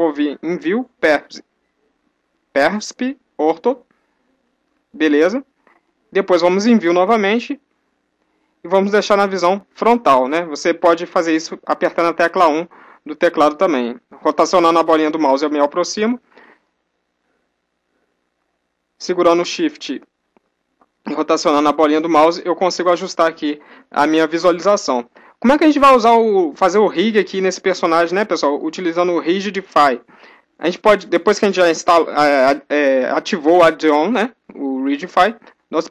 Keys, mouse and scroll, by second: 13.6-24.2 middle drag, 35.5-35.9 typing.